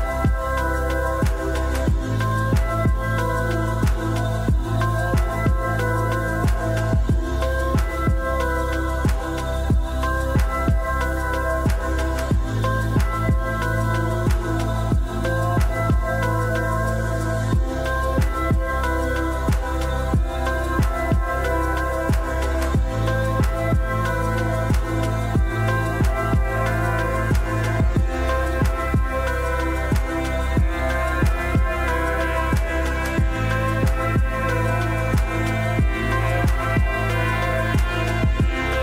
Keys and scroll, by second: 1.4-2.6 typing, 5.9-7.5 typing, 9.2-10.0 typing, 17.5 r, 32.6-34.4 typing, 37.7-38.8 typing.